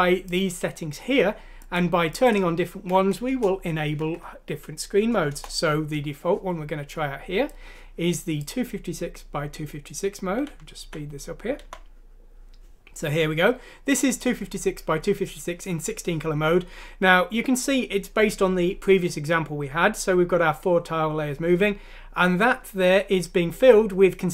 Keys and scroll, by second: 4.0 F6, 5.3 Return, 10.5 End.